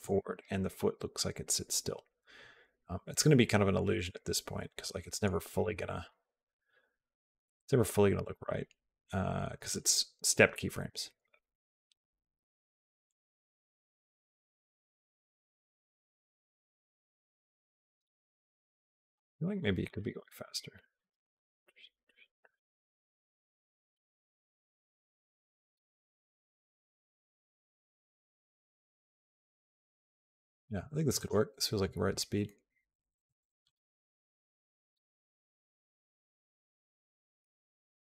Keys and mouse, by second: 5.4 click, 6.0 space, 17.8 space, 19.0 g, 20.3 click, 25.6 click.